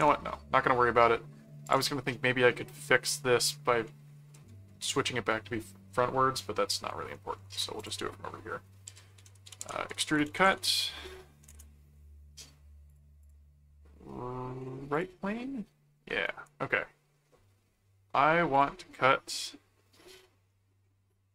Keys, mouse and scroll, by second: 1.6 click, 2.5-3.5 middle drag, 3.8 middle click, 4.5 ctrl+1, 7.3 ctrl+4, 7.8 click, 8.6-11.1 typing, 11.5 Return, 12.9 click, 14.9 click, 16.2 right click, 18.5 click.